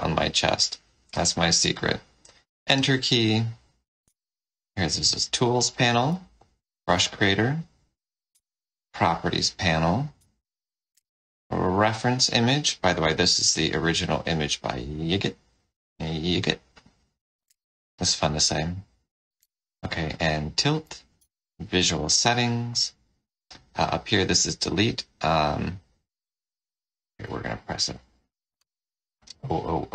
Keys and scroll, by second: 4.0 F3, 6.0 F5, 8.2 F4, 10.8 ctrl+r, 17.3 ctrl+r, 21.1 F12, 27.1 ctrl+d.